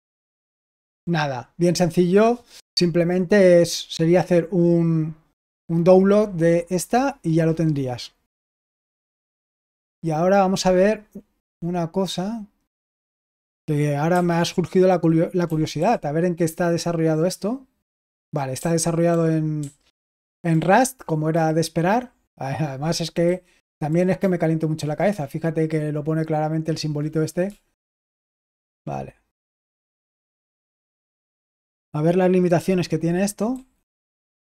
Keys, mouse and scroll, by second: 0.8 typing, 9.0 typing, 14.0 typing, 15.4 typing, 18.4-21.2 typing, 23.1-24.0 typing, 27.3-29.2 typing, 33.4-33.8 typing.